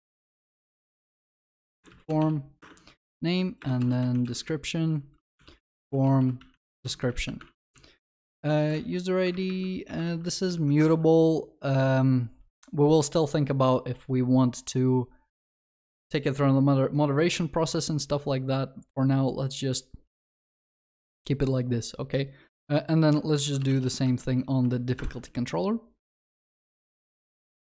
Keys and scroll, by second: 1.7 Return, 7.5 ctrl+s, 9.3 ctrl+BackSpace, 23.4 ctrl+shift+n.